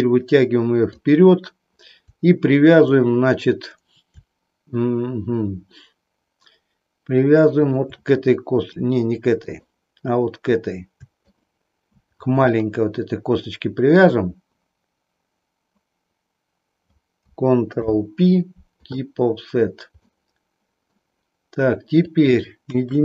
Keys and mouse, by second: 9.4 shift+click, 11.4 shift+click, 12.5-14.0 shift+middle drag, 17.7 ctrl+p, 20.1 middle click, 22.0 click, 22.6 KP_1.